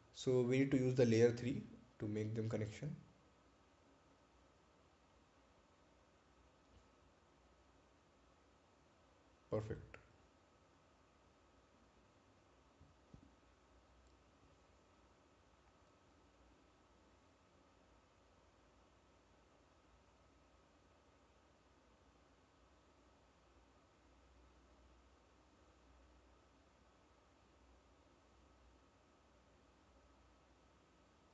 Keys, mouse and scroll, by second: 2.8 click, 5.2 click, 11.1 click, 13.6 click, 18.2 click, 24.9 click, 31.1 click.